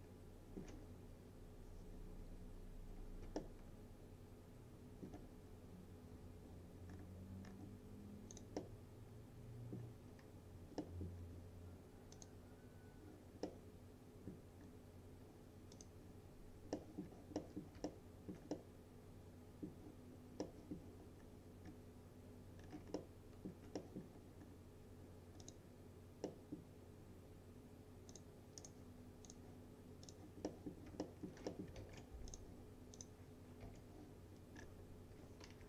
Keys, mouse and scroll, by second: 3.4-5.3 alt+middle drag, 5.5 scroll up 1, 8.4 click, 8.6-9.9 middle drag, 11.2-12.2 scroll down 1, 12.2 click, 13.5-14.4 middle click, 14.7-15.8 scroll down 1, 15.8 click, 16.8 middle click, 17.1-17.4 scroll down 1, 17.4 middle click, 17.9-18.5 alt+middle click, 18.6-19.8 middle drag, 21.3 scroll up 1, 21.7 scroll down 1, 23.0-23.6 alt+middle click, 24.5-25.0 scroll up 1, 25.5 click, 26.3 middle click, 28.2 click, 28.7 right click, 29.3 click, 30.5 middle click, 30.8 scroll down 1, 31.1 alt+middle click, 31.5 middle click, 31.8 ctrl+s, 32.4 click, 33.7 u, 34.6 scroll down 1.